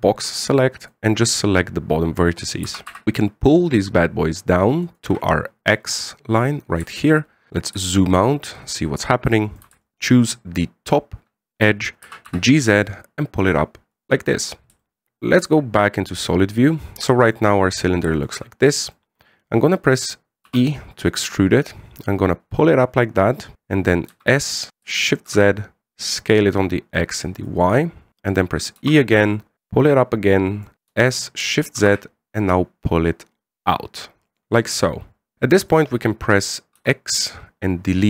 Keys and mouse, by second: 3.0 g, 7.8 shift+middle click, 8.7 shift+middle click, 10.0 alt+shift+right click, 12.8 g, 15.0 middle click, 16.2 z, 16.6 middle click, 17.8 middle click, 18.9 shift+middle click, 19.1 middle click, 21.2 e, 24.7 s, 29.5 e, 31.7 s, 36.3 middle click, 37.5 x.